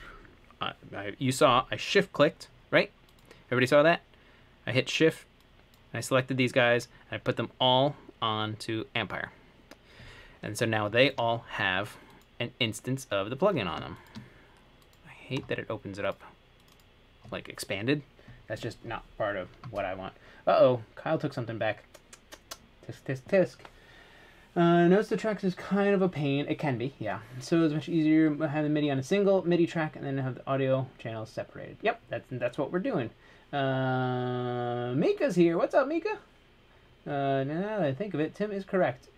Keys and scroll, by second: 0.0-1.8 typing.